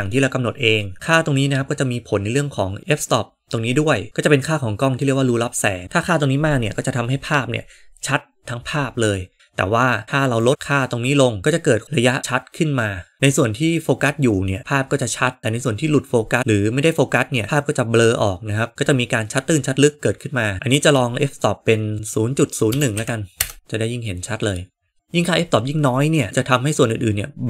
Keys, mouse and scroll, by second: 10.4-13.2 drag, 21.9-23.5 drag.